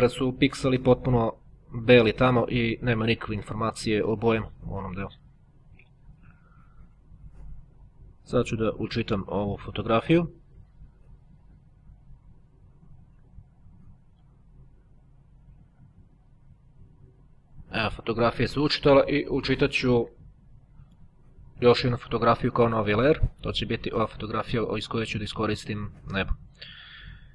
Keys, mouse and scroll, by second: 6.1 click, 7.4 click, 8.2 right click, 9.6 click, 17.0 click, 20.3 click, 21.8 click, 22.9 click, 25.1 click, 26.0 click.